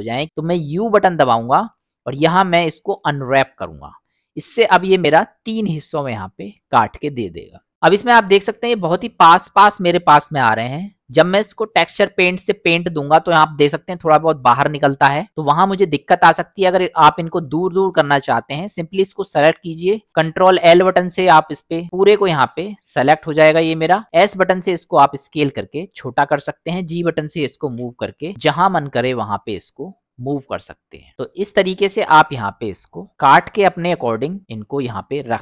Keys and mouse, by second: 0.3 u, 5.2 middle click, 6.6 middle click, 8.1 middle click, 15.8 middle click, 17.6 click, 17.9-18.7 drag, 20.7 ctrl+l, 24.1 s, 26.9 f, 27.7 g, 32.3-33.4 middle drag, 34.0 click.